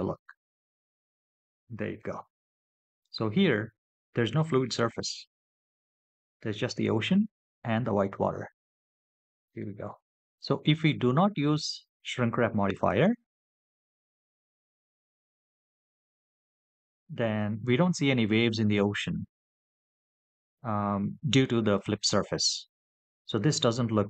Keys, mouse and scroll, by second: 0.1 click, 9.1 middle click, 13.4 click.